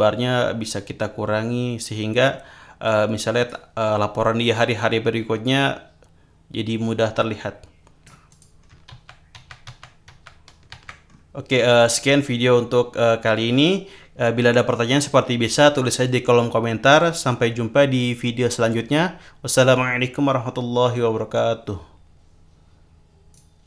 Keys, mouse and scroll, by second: 2.8-6.0 drag, 6.8-8.6 drag, 8.6 scroll down 2, 8.9 ctrl+z, 11.0-11.5 scroll up 2, 11.6 scroll up 2, 11.9 click, 23.3 click, 23.6 click.